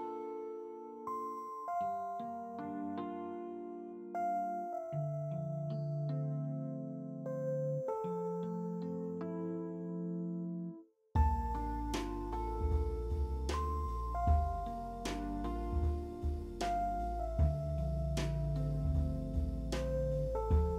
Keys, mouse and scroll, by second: 4.8 middle click, 5.1 middle click, 5.7-6.8 scroll up 1, 9.7 w, 10.4 z, 10.5 alt+middle click, 14.7 alt+middle click, 15.4 ctrl+middle click, 15.4 ctrl+alt+middle click, 16.0 alt+middle click, 20.5 e.